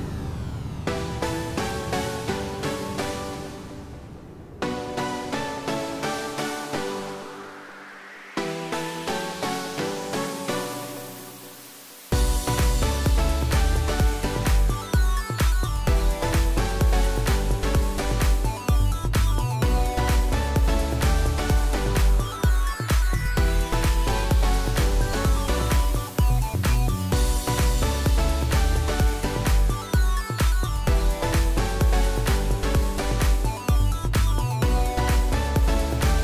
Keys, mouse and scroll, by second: 2.0 click, 11.8 Delete, 17.0 click, 25.5 shift+click.